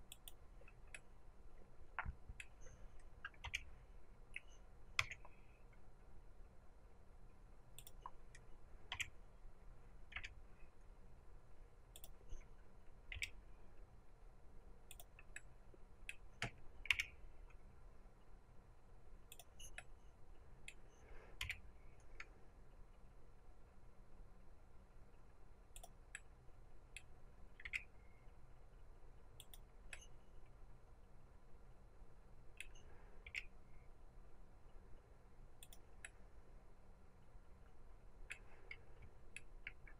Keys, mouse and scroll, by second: 0.8-7.8 middle drag, 3.3 r, 7.8 click, 8.8 r, 11.9 click, 13.0 g, 14.9 click, 15.3-19.3 middle drag, 16.8 g, 19.3 click, 19.7-25.7 middle drag, 21.3 g, 25.7 click, 26.0-35.6 middle drag, 27.5 g, 31.7 click, 33.2 g, 35.6 click, 35.9-39.9 middle drag, 38.4-39.3 scroll.